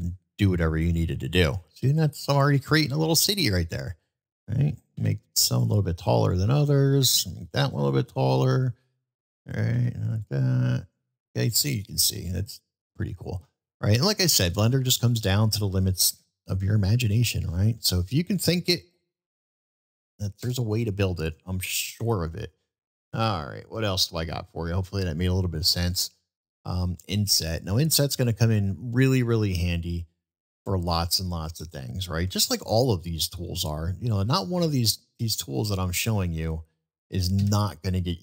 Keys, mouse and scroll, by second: 3.8 click, 6.2 click, 7.6 click, 7.6 e, 8.1-8.6 middle drag, 10.1 click, 10.1 e, 10.6 middle click, 11.7 middle click, 12.6 middle click, 13.8-14.2 middle drag, 14.9-15.3 middle drag, 20.4 Delete, 20.4 Delete, 32.4 shift+a, 37.4 Tab.